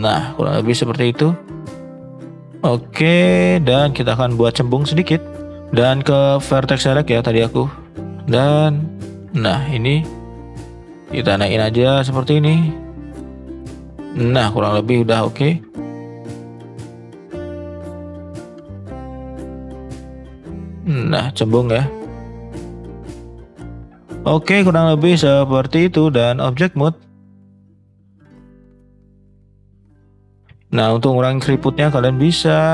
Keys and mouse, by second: 0.0 middle drag, 1.0-1.4 shift+middle drag, 1.7 middle click, 2.0 middle click, 2.2 shift+middle click, 2.7 click, 4.0 shift+middle click, 4.7 shift+middle click, 7.6 click, 8.9 alt+shift+click, 10.1 shift+click, 11.0-12.2 drag, 12.6-14.5 middle drag, 15.1 middle click, 16.1 shift+middle click, 16.8-17.5 middle drag, 18.2 middle click, 19.3 click, 20.4-22.1 middle drag, 22.8 middle drag, 23.4 ctrl+z, 23.7 click, 24.2 middle click, 24.9 middle click, 26.0 click, 27.0 middle drag, 28.2 middle drag, 29.2 shift+middle drag, 30.4 Tab, 31.5 Tab, 31.8 middle click.